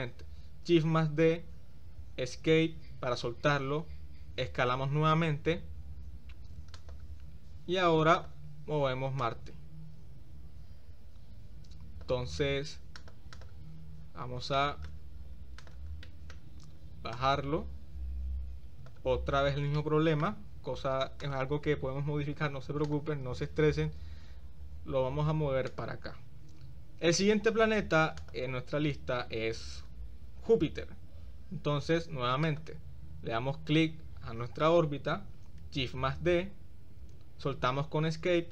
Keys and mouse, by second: 0.8 shift+d, 1.2-2.8 middle drag, 5.2 s, 8.2 drag, 9.2-12.2 drag, 13.0 click, 14.6 shift+middle click, 16.1 shift+middle click, 17.1-19.0 drag, 19.8-20.3 middle drag, 21.2 click, 22.3 click, 22.9 click, 24.0 shift+d, 35.9 shift+d.